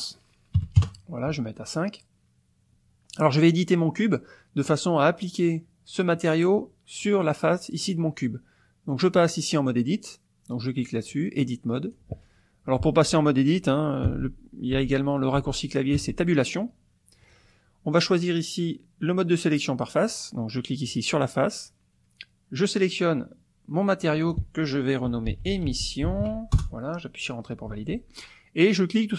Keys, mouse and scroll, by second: 0.6 KP_5, 0.9 KP_Enter, 9.4-10.8 drag, 11.8 click, 14.1 Tab, 19.7 click, 20.9 click, 23.0 click, 24.2 click, 25.1-26.3 typing, 26.6 Return.